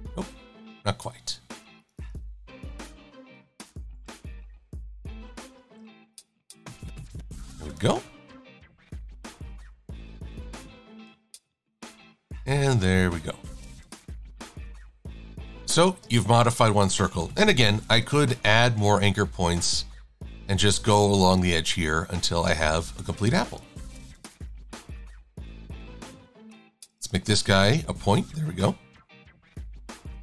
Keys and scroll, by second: 16.1 shift+a.